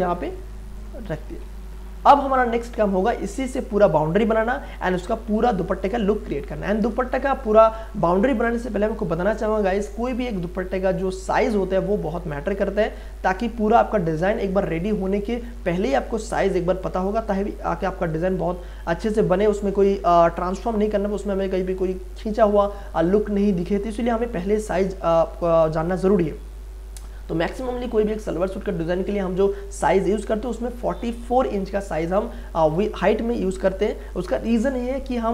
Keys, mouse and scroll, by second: 1.4 space, 1.7-11.7 ctrl+drag, 31.3 ctrl+alt+c, 32.7 click.